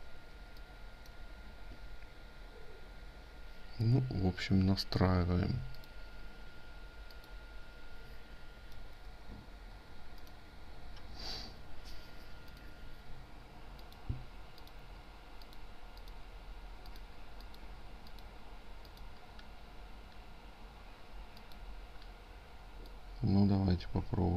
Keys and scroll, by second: 8.2 ctrl+z.